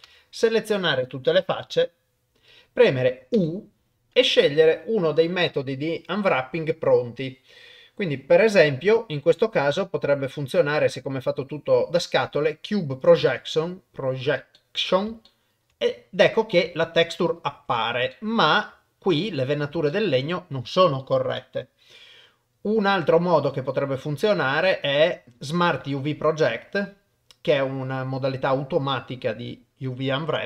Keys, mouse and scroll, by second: 0.1 a, 3.3 u, 14.6 middle click, 15.3 shift+middle click, 16.3 middle click, 16.8 shift+middle click, 18.1 shift+middle click, 19.9 shift+middle click, 23.2 u.